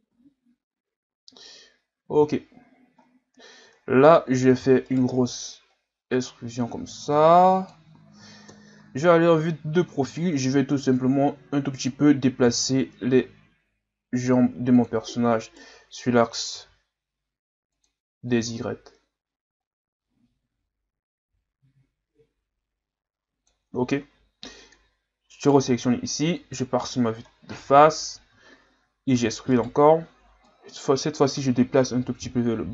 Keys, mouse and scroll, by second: 0.1 a, 0.4-1.3 scroll down 6, 1.3 scroll down 1, 1.5-2.4 scroll up 4, 2.4-3.0 scroll down 4, 3.0-3.7 scroll up 1, 3.7 Tab, 4.5 e, 5.6-8.5 drag, 8.5 KP_3, 10.2-12.4 drag, 12.4 r, 15.4 alt+right click, 16.5 r, 18.3-21.4 drag, 25.3 alt+right click, 26.3 KP_1, 27.3 scroll down 4, 27.9 scroll up 2, 28.4-29.2 scroll down 1, 29.2 e, 30.5-32.7 drag.